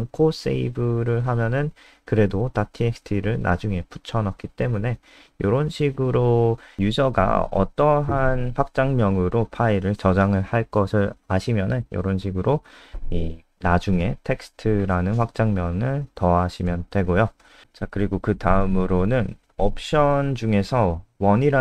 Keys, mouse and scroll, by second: 12.7-13.2 scroll down 4, 13.7 click, 16.9-21.6 typing.